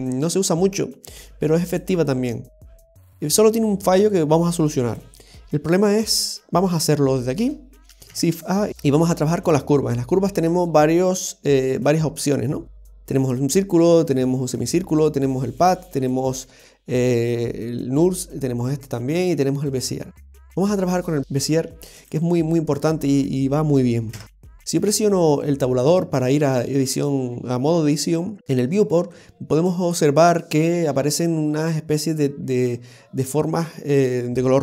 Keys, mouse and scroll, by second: 1.3 Tab, 1.3 x, 2.7 shift+middle click, 4.1 click, 5.8-6.7 scroll up 6, 6.7 scroll down 2, 6.9 scroll down 3, 8.1 shift+a, 24.1 Tab, 24.8 scroll up 2, 27.1 scroll up 1, 29.1 shift+middle click.